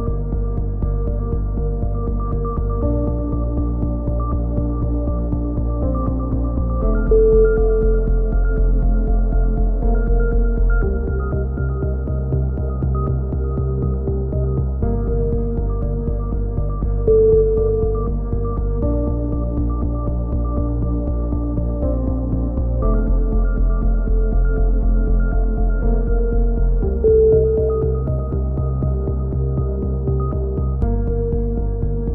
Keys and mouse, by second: 1.1 a, 1.3 click, 7.5 right click, 7.7 click, 8.3 click, 9.0 right click, 9.4 KP_3, 9.5 z, 11.0 e, 11.6-13.0 drag, 13.0 c, 13.5 click, 13.5 right click, 13.9 c, 14.3-15.9 drag, 14.3 right click, 14.5 ctrl+z, 16.5 c, 17.0-18.5 drag, 17.0 right click, 18.6 click, 18.6 a, 18.7 z, 20.5 right click, 21.0 KP_3, 21.4 a, 21.6-22.6 right drag, 22.3 z, 22.4-23.6 drag, 24.0 g, 25.1 g, 25.8 a, 26.6 z, 26.8 click, 27.9 z, 28.0 click, 30.7 right click, 31.3-32.1 drag.